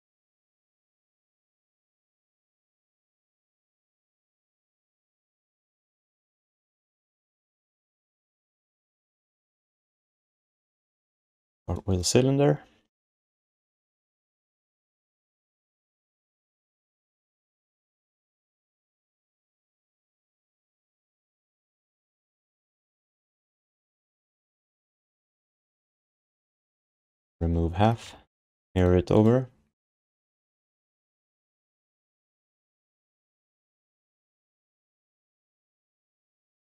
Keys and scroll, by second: 3.4 ctrl+a, 5.6 ., 9.5 ctrl+s, 12.1 r, 16.8 f, 22.8 q, 25.5 q, 27.6 w, 28.3 ctrl+shift+d, 30.4 ctrl+w, 32.0 ctrl+q, 32.9 ctrl+w, 35.8 ctrl+q.